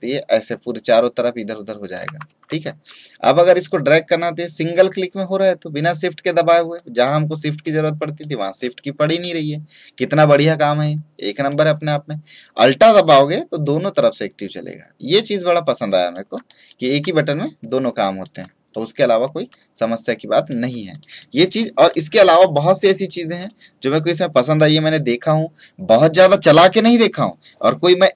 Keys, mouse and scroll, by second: 2.4 ctrl+z, 3.7-16.4 drag.